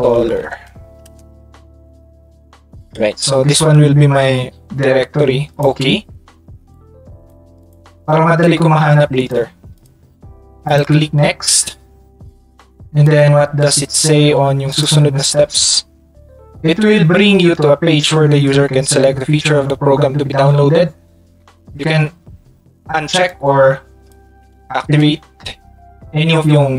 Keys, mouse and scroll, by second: 0.4 r, 5.5 click, 6.7 click, 7.6 click, 8.5 click, 9.8 click, 13.1 click, 14.7 click, 21.5 middle click, 21.9 Tab, 23.3 click, 23.7 click.